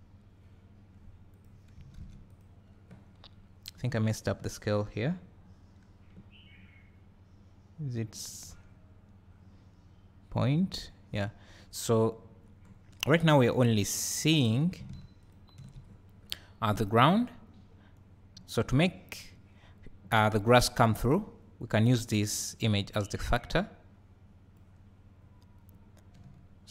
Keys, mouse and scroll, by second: 1.6 click, 2.5 click, 10.4 click, 15.3 ctrl+shift+click, 16.3 scroll up 3, 22.5-26.7 drag, 26.3 `.